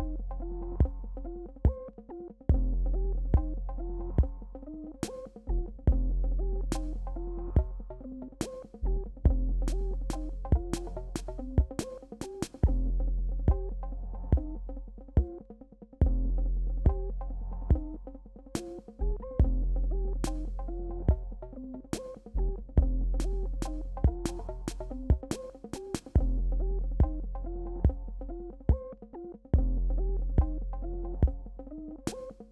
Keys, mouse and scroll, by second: 0.2 click, 0.6 Return, 1.5 click, 2.3 right click, 2.9 click, 3.3 Return, 4.1 click, 5.5 right click, 6.1 click, 6.3 Return, 7.0 BackSpace, 7.3 space, 7.4 click, 8.0 click, 8.0 space, 9.3 alt+right click, 11.4 click, 11.7 Return, 12.4 BackSpace, 13.4 click, 15.1 right click, 16.1 click, 16.2 Return, 16.9 BackSpace, 17.3 click, 18.1 ctrl+z, 18.3 click, 18.5 right click, 19.2 click, 19.8 Return, 20.4 BackSpace, 21.2 space, 21.2 click, 21.4 space, 21.8 click, 23.3 right click, 24.1 Return, 24.7 BackSpace, 25.7 click, 26.3 right click, 27.2 click, 27.6 Return, 29.5 click, 30.5 right click, 31.2 click, 31.4 Return, 32.1-32.5 drag.